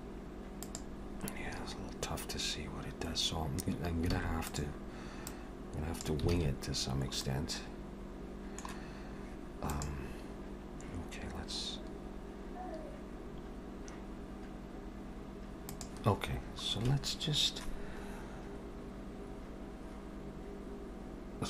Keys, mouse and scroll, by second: 1.0-2.4 scroll down 3, 2.4-4.1 scroll up 1, 4.2 alt+a, 4.5 click, 5.3 click, 6.3 alt+a, 6.9 scroll down 2, 7.3 middle click.